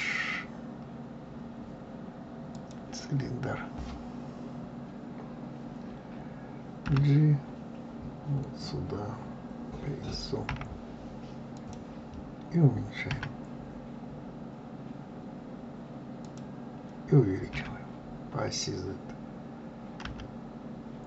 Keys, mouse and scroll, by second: 6.9 g, 13.1 s, 17.5 s.